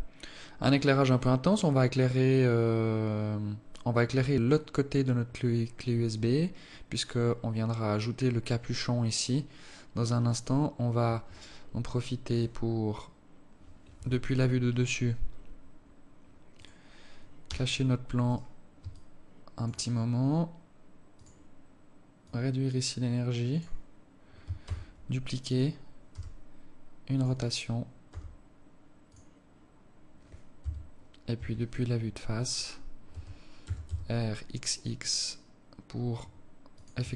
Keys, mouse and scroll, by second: 11.5 Escape, 14.3 KP_7, 15.0-16.3 scroll down 12, 16.9 right click, 17.9 h, 18.7 right click, 19.3 alt+shift+click, 21.5 click, 22.6 click, 25.0 shift+d, 26.5 r, 28.6 g, 31.0 KP_3, 31.7 KP_1, 33.5 r.